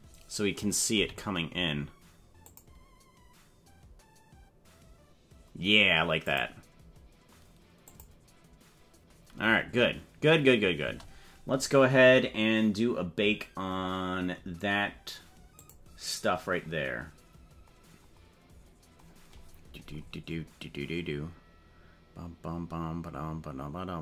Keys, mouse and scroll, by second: 1.0 g, 6.3 click, 7.9 click, 10.8 space, 15.5 click.